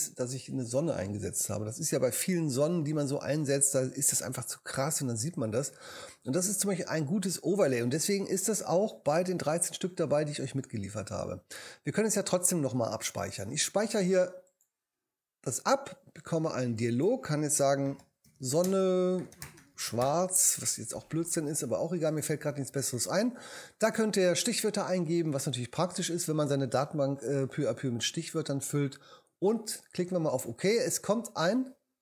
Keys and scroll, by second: 17.6-20.5 typing.